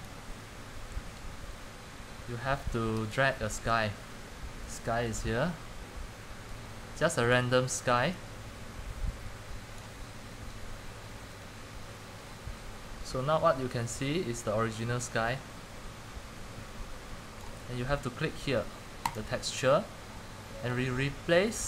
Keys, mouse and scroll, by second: 17.5-21.6 drag.